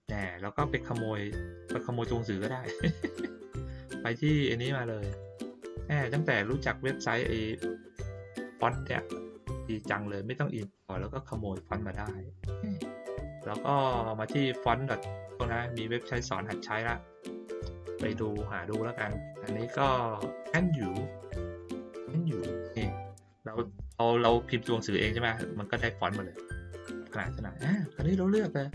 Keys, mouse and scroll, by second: 3.5 click, 5.6 click, 13.1 click, 16.0 click, 26.8 click.